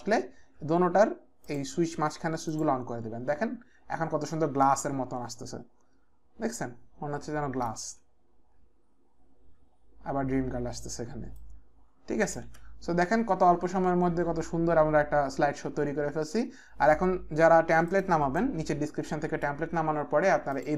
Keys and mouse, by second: 2.5 click, 4.8 click, 7.9 space, 11.4 click, 12.5 space, 17.9 click, 18.4 click, 20.5 click.